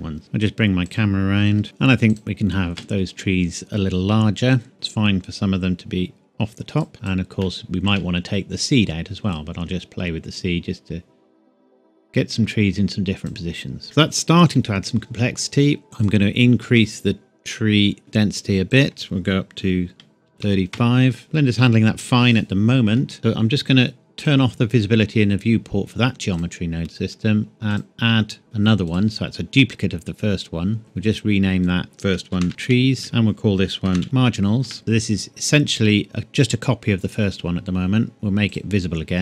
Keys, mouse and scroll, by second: 0.2 g, 0.8 click, 1.5 r, 1.6-2.1 scroll up 1, 2.1 click, 4.7 click, 7.8 shift+middle click, 9.3 click, 13.8 middle click, 14.2-14.6 scroll up 1, 16.0 click, 20.2 KP_3, 20.4 KP_5, 20.7 KP_Enter, 21.2 middle click, 21.6 scroll down 1, 23.0 scroll up 1, 23.1 scroll down 1, 24.2 click, 28.8 click, 32.3-34.2 typing, 33.0 click, 34.6 KP_Enter, 34.8 click.